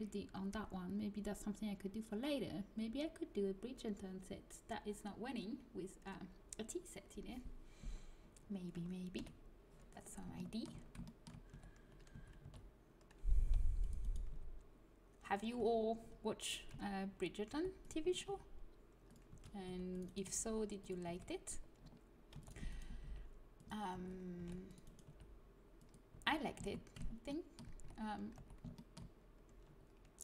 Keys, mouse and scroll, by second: 8.2 middle click, 9.1 KP_1, 10.3 middle click, 11.4-14.2 typing, 15.6 a, 16.6 z, 17.4 c, 18.2 g, 19.2 a, 19.6 c, 20.2 g, 23.9 a, 24.3 c, 25.0 g, 26.0 a, 27.8 z, 28.3 z.